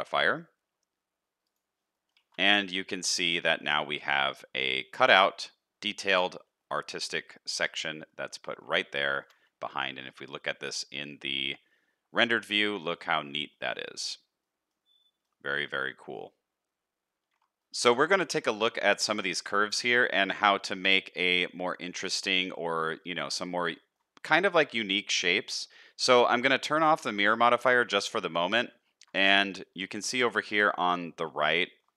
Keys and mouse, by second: 1.9 middle drag, 2.1 alt+a, 2.3 middle click, 3.1 middle click, 3.9-6.3 middle drag, 6.9 middle click, 8.1-8.6 middle drag, 8.7 z, 10.1-10.4 middle drag, 12.4 middle drag, 12.9 middle drag, 13.5 middle click, 14.4 middle drag, 15.0 middle click, 15.5-17.8 middle drag, 18.1 Tab, 18.4 middle click, 18.9 shift+middle click, 19.4 alt+a, 19.7 middle click, 20.6 shift+middle click, 22.4 click, 23.2 middle click, 23.8 shift+middle click, 24.5 shift+middle click, 27.8 middle click, 28.8 shift+middle click, 29.2 alt+a, 29.7 middle click, 30.5 shift+middle click, 30.8 middle click, 31.5 shift+middle click.